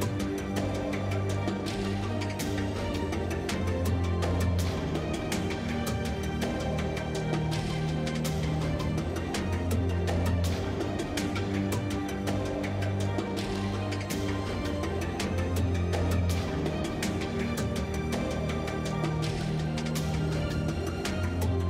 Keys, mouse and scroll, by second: 2.1 Tab, 4.9 shift+e, 5.3 Tab, 6.9 z, 7.2 z, 8.1 Tab, 8.5 Tab, 9.1 t, 10.4 t, 11.2-12.9 drag, 13.0-14.2 drag, 15.8 z, 16.4 z, 20.9 Tab.